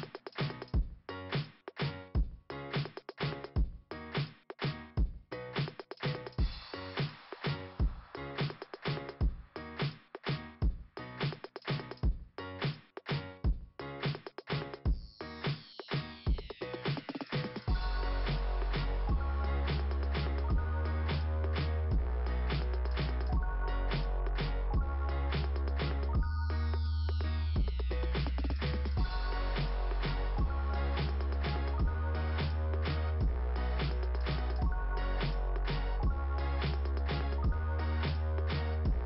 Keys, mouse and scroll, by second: 0.8 click, 4.3 scroll down 2, 4.9 click, 5.0 scroll down 1, 5.0 click, 5.9-6.7 scroll down 1, 6.7 scroll up 1, 7.4 click, 16.9-18.1 scroll down 2, 20.1 click, 20.3 click, 22.1 click, 23.2 click, 23.8 click, 23.8 double click, 24.6 double click, 25.3 click, 26.5 click, 26.6 click, 28.3 click, 30.4 click, 32.5 click, 32.7 click, 33.4 click, 35.2 click, 37.1-37.7 scroll up 3.